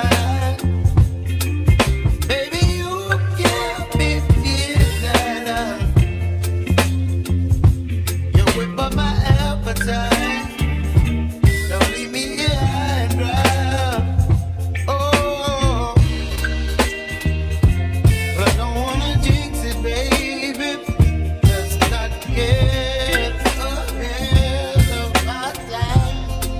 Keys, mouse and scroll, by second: 0.9 1, 2.5-3.4 scroll down 1, 3.4-4.9 drag, 7.9 s, 11.9 g, 12.7 x, 14.3 g, 21.4 ctrl+z, 22.6-25.1 middle drag.